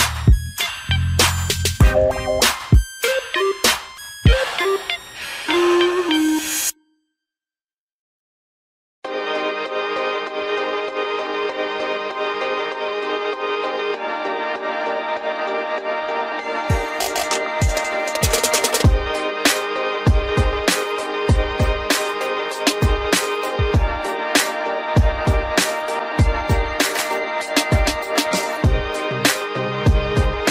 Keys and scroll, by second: 7.1 ctrl+g, 16.3 ctrl+alt+shift+space, 16.6 ctrl+alt+shift+e.